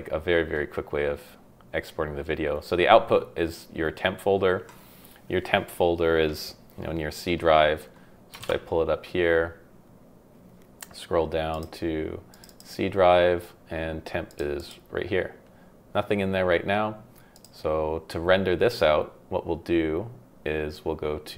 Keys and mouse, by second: 17.3 click.